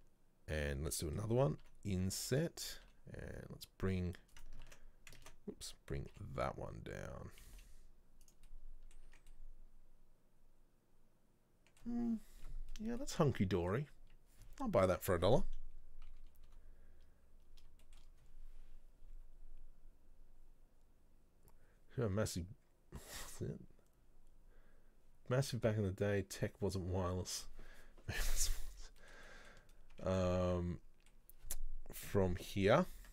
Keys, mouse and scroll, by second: 1.7 i, 5.3 ctrl+z, 6.2 g, 8.5 middle click, 9.2 Tab, 9.4-12.8 middle drag, 12.8-13.1 scroll up 2, 13.1-16.2 middle drag, 16.2 KP_3, 17.9-19.7 shift+middle drag, 19.7-20.8 scroll down 2, 29.1-29.7 shift+middle drag, 29.7 scroll up 1, 30.0 Tab, 30.2-32.2 middle drag, 32.2 KP_3.